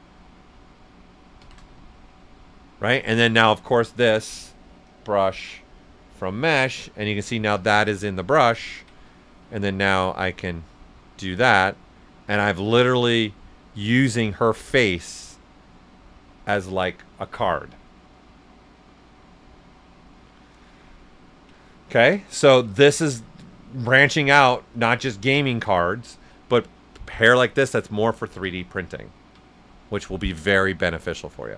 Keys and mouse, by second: 1.4 shift+f, 4.8 click, 7.5 s, 7.6 click, 8.2 alt+right click, 9.0-11.8 ctrl+drag, 11.8-21.6 right drag, 22.2 right click, 23.0 ctrl+alt+super+right click, 24.7 click, 25.1 ctrl+right click, 28.3 ctrl+alt+right click, 28.4 ctrl+z, 30.8 alt+right click.